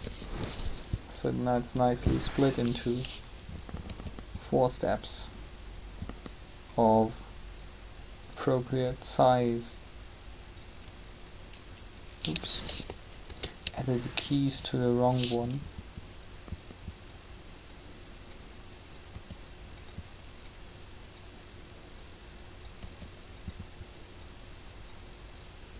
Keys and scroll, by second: 3.8 r, 12.7 ctrl+z, 19.1 r, 22.8 r.